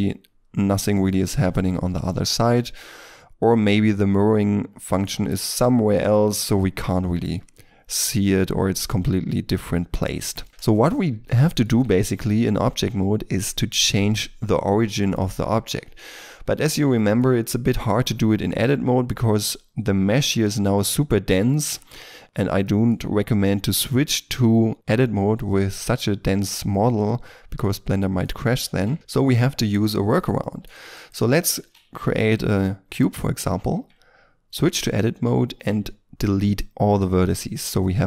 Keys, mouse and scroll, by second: 11.4 shift+middle click, 11.7 Tab, 14.8 middle click, 16.9 shift+middle click, 17.6 middle click, 20.2 z, 20.7-21.6 scroll, 21.6 z, 22.2-22.6 scroll down 1, 22.6 shift+middle click, 23.0-25.2 shift+scroll down 1, 26.7 middle click, 28.5 shift+middle click, 28.9 middle click, 30.4 shift+middle click, 31.5 shift+a, 32.8 middle click, 33.6 Tab, 35.5 Delete.